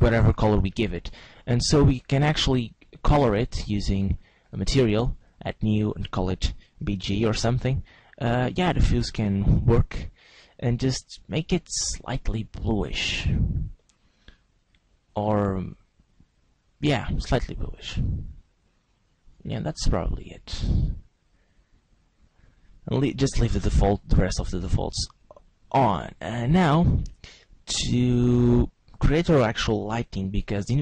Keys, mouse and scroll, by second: 3.2 click, 4.3 click, 5.2 click, 5.7 click, 9.4 click, 29.7 shift+a.